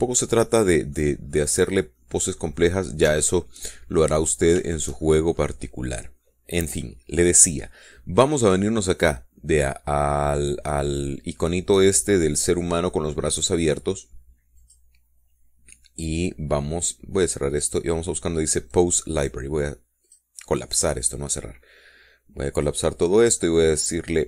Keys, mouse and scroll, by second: 0.0 shift+scroll up 2, 0.2 middle click, 0.4 scroll down 2, 0.7-2.3 middle drag, 3.2 click, 4.0-4.4 scroll up 1, 4.4 shift+click, 5.0 shift+click, 5.4 shift+scroll down 1, 5.9 shift+click, 15.9 click, 18.8 click, 21.3 click, 22.3 click, 23.8 click.